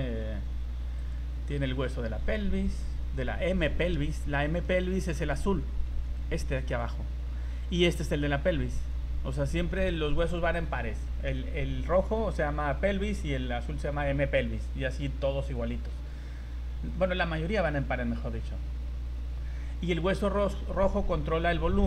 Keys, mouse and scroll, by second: 0.9 click, 1.4 scroll down 3, 1.6 z, 2.0 z, 2.3-2.7 scroll up 3, 4.2 scroll down 3, 4.6 middle click, 5.9 v, 6.2 right click, 6.7 right click, 8.8 right click, 13.1 right click, 16.5 scroll down 1, 16.9 middle click, 18.6 scroll down 3, 19.5-20.0 scroll up 5.